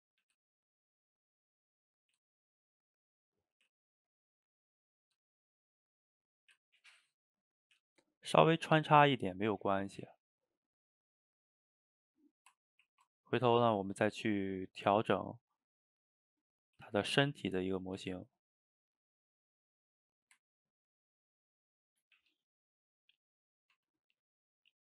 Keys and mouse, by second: 0.1 click, 0.3 g, 1.3-1.9 middle drag, 1.9 click, 2.1 g, 3.1-3.5 middle drag, 3.5 g, 4.9 click, 5.0 g, 5.8-6.3 middle drag, 6.3 click, 6.4 g, 7.0-7.7 middle drag, 7.7 g, 8.7-9.9 middle drag, 9.9 click, 10.1 g, 11.4-12.0 middle drag, 12.0 click, 12.2-12.9 middle drag, 12.9 ctrl+t, 14.4-14.9 middle drag, 14.9 g, 16.3 middle click, 16.7 g, 17.3-17.9 middle drag, 17.9 click, 18.0 g, 19.9-22.2 middle drag, 22.2 g, 23.3-23.8 middle drag, 23.8 Tab, 24.1-24.8 middle drag.